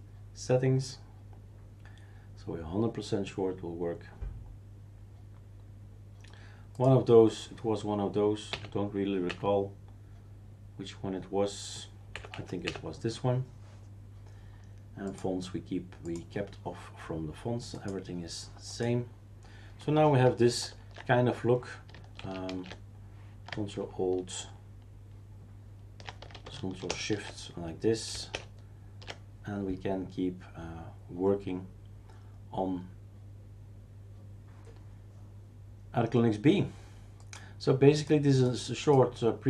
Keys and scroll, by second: 8.5 Home, 9.3 Up, 12.1 Up, 12.3 Up, 12.6 Up, 20.6 ctrl+alt+t, 22.2 shift+super+q, 22.5 shift+super+q, 26.9 shift+super+Return, 28.3 shift+super+Return.